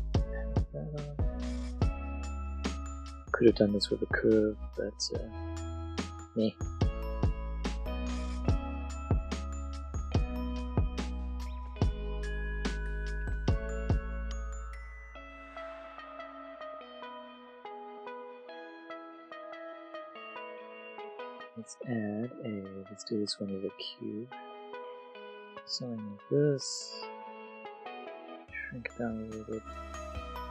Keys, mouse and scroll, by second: 0.0 click, 0.0 r, 0.5 r, 1.2 click, 1.4 g, 2.1 click, 2.8 r, 4.0 click, 5.1 e, 5.5 click, 6.2-10.2 typing, 6.9 click, 7.4 click, 7.5 click, 7.9 click, 8.1 click, 8.3 click, 8.7 click, 9.1 click, 9.3 click, 9.5 click, 9.8 click, 10.0 click, 10.4 click, 10.8 middle click, 11.1 middle click, 11.3 middle click, 11.4 click, 12.3 click, 12.4 alt+Tab, 12.6 click, 13.5 click, 14.1 click, 14.4 middle click, 15.2 click, 15.5 Tab, 15.6 a, 15.8 middle click, 15.9 middle click, 15.9 click, 16.7 click, 16.9 click, 17.1 click, 17.7 click, 18.4 click, 19.1 Tab, 19.1 click, 19.4 middle click, 19.5 click, 20.0 shift+click, 20.0 click, 20.1 middle click, 20.1 click, 20.2 shift+click, 20.4 click, 21.8 click, 24.0 click, 24.2 space, 24.7 click, 24.8 shift+a, 25.2 click, 25.4 ctrl+click, 28.2 s, 28.7 click, 30.3 Tab, 30.4 click.